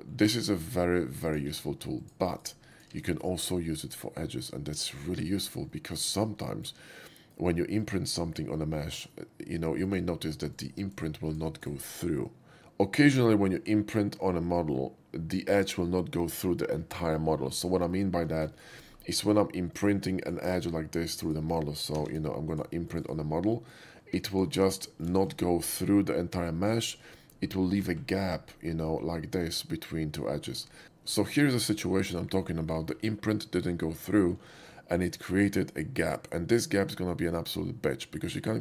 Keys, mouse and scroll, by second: 0.2 middle click, 0.4 middle click, 1.2 click, 1.7 2, 2.1 click, 2.4 right click, 2.8 click, 3.0 x, 4.0-4.8 middle drag, 5.0 shift+middle click, 5.8 shift+middle drag, 6.6 shift+middle drag, 7.8 shift+click, 8.8 shift+click, 9.9 click, 10.6 right click, 10.9 right click, 11.4 click, 11.5 right click, 18.0 alt+middle click, 18.4 alt+shift+middle drag, 18.6 shift+middle click, 19.8 shift+click, 20.3 shift+click, 21.1 shift+click, 22.2 shift+q, 22.5 click, 23.0 click, 23.1 right click, 23.4 middle click, 24.1 2, 24.4 click, 24.6 x, 24.9 middle drag, 25.2 shift+middle drag, 25.6 shift+middle click, 26.6 middle drag, 26.9 shift+middle click, 27.2-27.9 scroll up 4, 28.0 shift+middle click, 28.3 shift+middle click, 28.5 shift+middle click, 28.7 shift+middle click, 28.9 shift+middle click, 30.3 middle click, 30.6 middle click, 30.8 middle click, 31.6 middle click, 32.0 middle drag, 32.4 shift+middle click, 32.7 shift+middle click, 33.0 shift+middle drag.